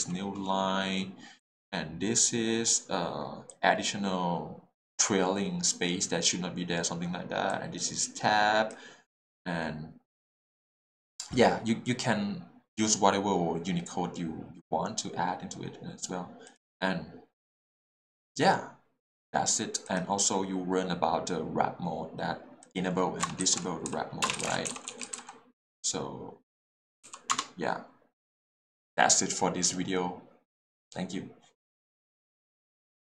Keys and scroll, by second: 23.9-25.1 typing, 27.0 a, 27.1 p, 27.3 Return.